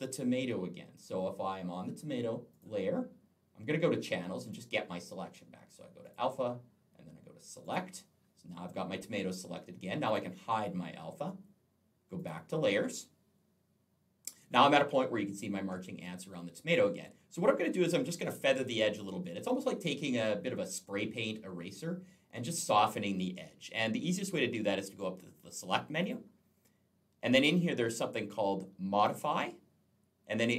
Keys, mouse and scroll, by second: 2.4 click, 4.3 click, 5.9 click, 7.5 click, 9.9 click, 12.0 click, 14.9-16.6 alt+scroll up 1, 16.8-17.9 alt+scroll down 1, 17.9-18.2 alt+scroll up 1, 25.9 click.